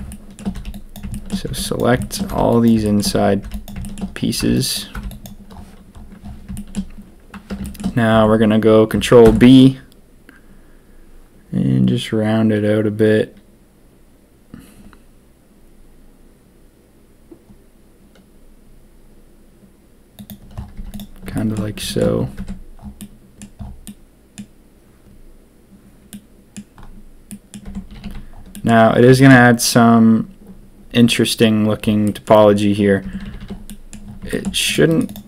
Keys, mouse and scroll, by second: 0.5 b, 1.1 shift+click, 1.4 b, 1.9 shift+click, 2.2 b, 2.8 shift+click, 3.4 b, 3.8 shift+click, 4.3 b, 4.9 b, 6.5 shift+click, 7.6 shift+click, 9.2 ctrl+b, 20.7 z, 21.4 shift+click, 21.9 shift+click, 22.3 Tab, 22.9 middle click, 23.8 middle click, 26.1-26.5 middle drag, 27.2 middle drag, 27.6 Tab, 27.8 a, 28.0 a, 28.5 middle click, 29.1 shift+middle click, 32.0 middle click, 33.0 Tab, 33.2 a, 33.3 a, 33.6 middle click, 34.3 shift+click, 34.6 click, 34.8 click.